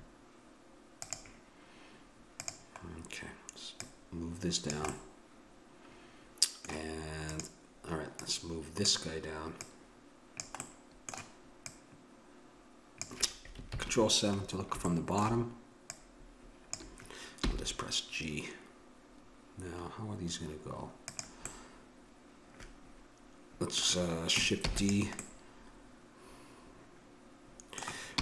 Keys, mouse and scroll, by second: 1.0-4.9 drag, 4.9-6.7 middle drag, 7.3-10.6 drag, 10.6-12.2 middle drag, 12.2-13.7 drag, 13.7 ctrl+KP_7, 14.3 middle click, 15.8 middle click, 16.5 click, 17.4 g, 21.5-23.3 middle drag, 24.6 shift+d, 25.3-27.1 middle drag, 28.1 r.